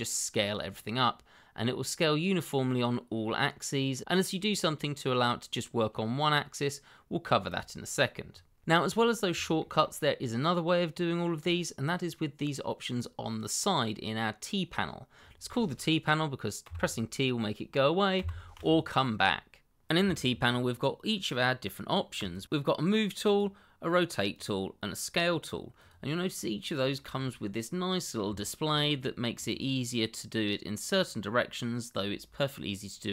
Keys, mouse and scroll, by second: 7.9 click, 8.9-9.3 scroll down 1, 9.4 shift+middle click, 9.5 middle click, 16.6 t, 22.1 click, 23.2 click, 26.3-26.9 scroll up 1, 26.9 middle click, 28.5 shift+middle click, 28.7 shift+scroll up 2, 29.0 middle click, 30.9 click.